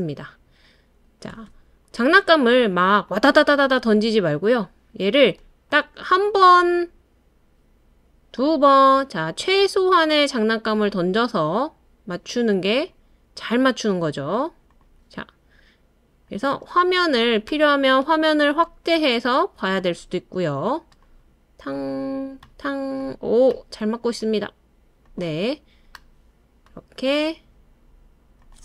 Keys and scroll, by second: 1.3 space.